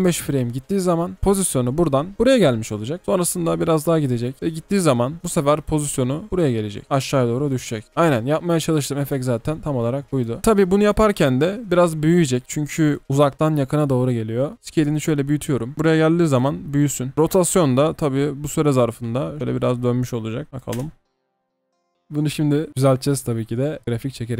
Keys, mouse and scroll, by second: 20.8 space, 24.3 F9.